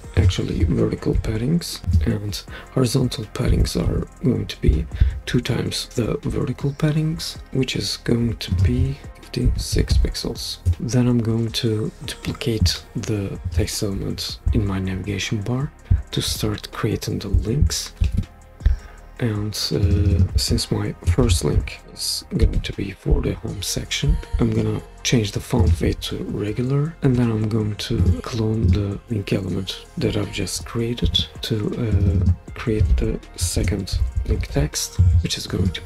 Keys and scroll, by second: 1.1-1.8 typing, 3.5-3.8 typing, 9.2-10.1 typing, 10.4 Return, 18.0 super+d, 20.9-22.9 typing, 31.0 super+d, 33.2-34.9 typing.